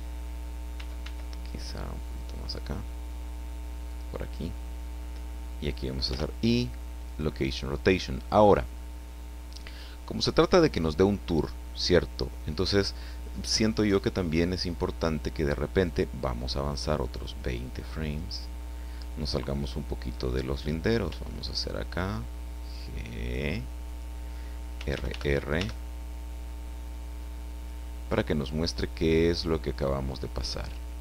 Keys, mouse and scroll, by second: 0.8 r, 3.8 click, 6.0 i, 7.0 click, 17.2-18.3 drag, 21.0 g, 23.8 click, 24.8 r.